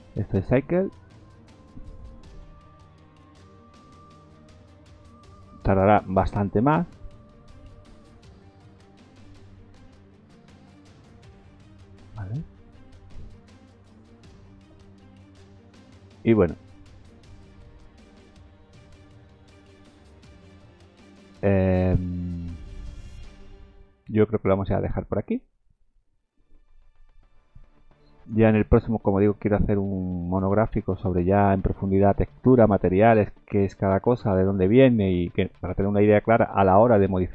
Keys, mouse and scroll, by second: 28.6 click.